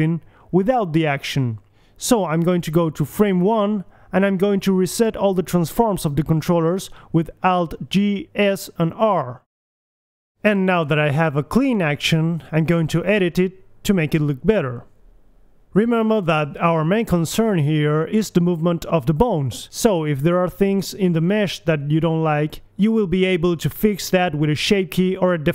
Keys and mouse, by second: 1.2 Right, 1.7 KP_1, 2.5 a, 2.7 a, 3.5 a, 5.6 alt+g, 6.0 alt+r, 6.3 alt+s, 6.5 a, 10.2 right click, 10.4 click, 11.1 g, 12.5-14.2 middle drag, 14.2 right click, 14.5 g, 14.9 g, 15.5 click, 16.0-20.7 typing, 16.6 click, 19.0 click, 21.8 g, 22.0 middle click, 22.4 KP_1.